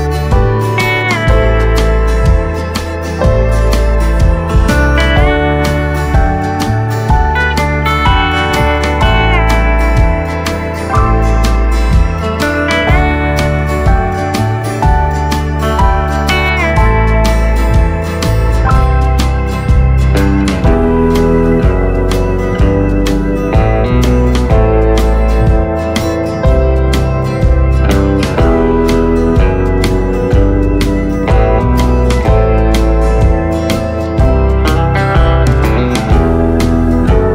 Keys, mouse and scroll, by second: 2.8 ctrl+z, 3.9 shift+d, 12.6-14.4 middle drag, 14.4-15.5 scroll up 2, 15.8 click, 16.8 shift+click, 17.4-19.2 middle drag, 19.2 s, 26.2-29.2 middle drag, 29.2 click, 29.9 click, 31.7 shift+click, 35.1 ctrl+j, 35.3 click, 35.7-37.3 middle drag.